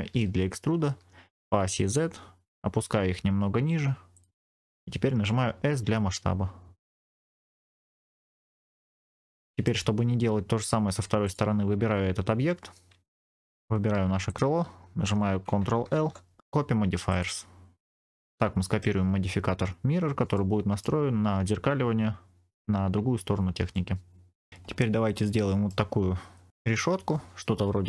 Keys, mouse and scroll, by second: 0.0 e, 1.3 z, 4.0 click, 5.1 s, 7.4 click, 7.7 middle click, 8.1 scroll up 2, 8.4 shift+middle click, 8.8 click, 8.8 scroll down 4, 9.1 middle click, 11.1 click, 14.2 shift+click, 15.8 ctrl+l, 17.8-18.8 middle drag, 20.2 middle click, 23.6 middle click, 24.5-25.1 scroll up 2, 25.1 middle click.